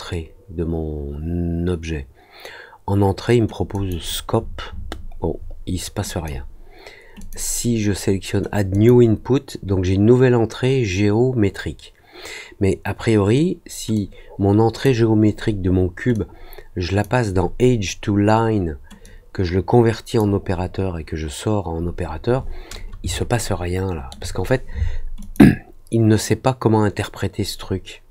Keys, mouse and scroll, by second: 3.7 click, 6.0 click, 7.1 click, 8.7 click, 13.9 click, 16.1 click, 19.0-20.1 drag, 23.1 alt+middle click, 25.1 click.